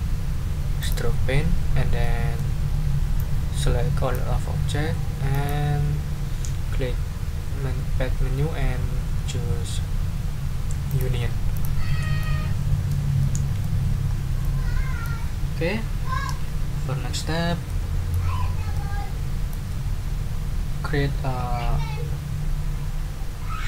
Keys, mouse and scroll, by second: 0.8 click, 2.0 click, 3.1-4.3 drag, 5.3 click, 10.9 click, 11.5 click, 12.2 middle click, 13.2 middle click, 14.0 ctrl+scroll up 2, 14.4 ctrl+middle click, 14.9-15.2 ctrl+scroll up 1, 17.7-18.3 scroll up 1, 18.7-19.7 scroll up 1.